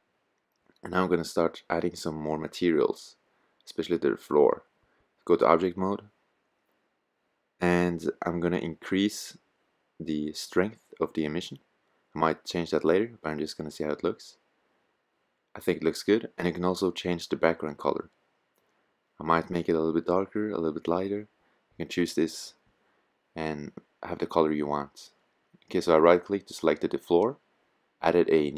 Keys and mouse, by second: 6.2 click, 9.3-12.2 drag, 15.5-18.2 drag.